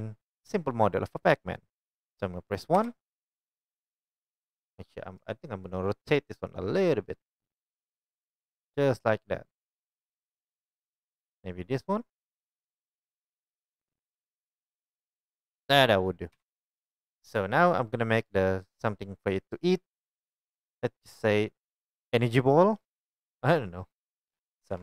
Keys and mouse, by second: 2.8 KP_1, 5.2 r, 13.8 click, 14.4-24.7 middle drag, 16.3 KP_1, 22.2 right click.